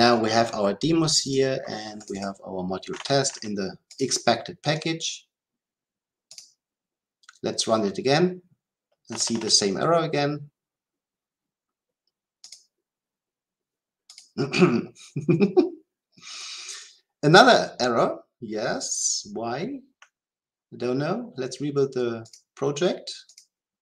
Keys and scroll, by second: 6.3 shift+F10.